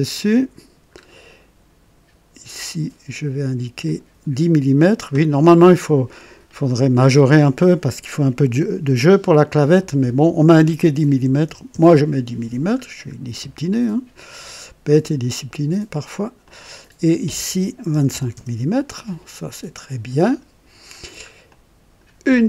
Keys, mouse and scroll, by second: 0.9 scroll up 2, 2.6 click, 3.9 click, 11.2 KP_1, 11.7 KP_0, 11.8 Return, 13.2 scroll up 1, 15.0 click, 16.4 click, 17.9 KP_2, 18.1 KP_5, 18.5 Return, 20.2 click, 21.0 scroll down 2, 21.5-22.2 drag, 21.5 typing.